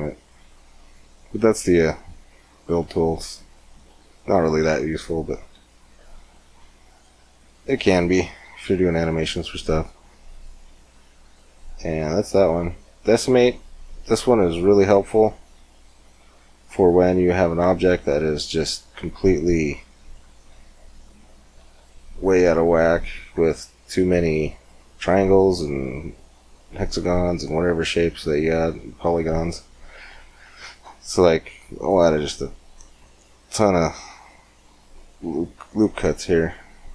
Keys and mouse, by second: 3.5 click, 4.4 z, 5.2 z, 5.8 x, 6.8-8.2 drag, 7.3 x, 8.2 shift+a, 11.2-13.1 drag, 15.6-17.4 drag, 17.4-18.4 middle drag, 18.4 Tab, 19.0-20.2 drag, 22.5 Tab, 23.2 Tab, 30.0-31.1 middle drag, 31.1 ctrl+r.